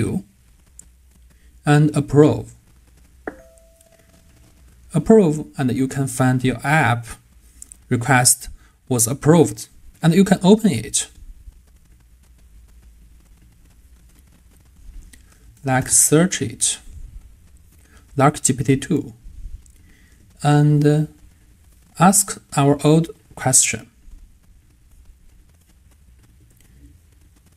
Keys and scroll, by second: 26.4 super+v.